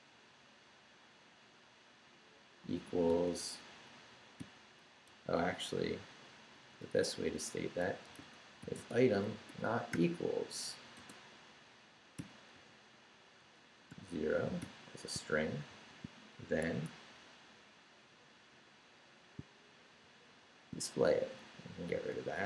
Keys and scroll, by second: 2.4 =, 3.1 space, 5.1 BackSpace, 6.3 BackSpace, 7.8-10.9 typing, 12.5-15.7 typing, 16.7 shift+Escape, 16.9 Down, 18.5 Down, 19.4 shift+Down, 19.9 shift+., 21.1 shift+Up, 21.8 Up, 21.9 d.